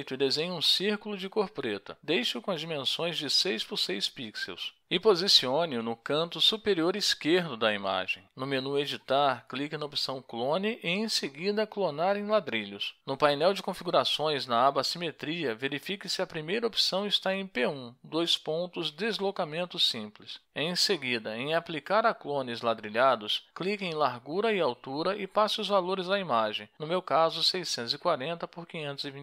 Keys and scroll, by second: 0.0-0.1 typing, 3.4 6, 3.6 Tab, 3.6 6, 5.4 ctrl+shift+a, 17.2-18.4 typing, 18.8 Tab, 20.1-21.2 typing, 21.5 Return.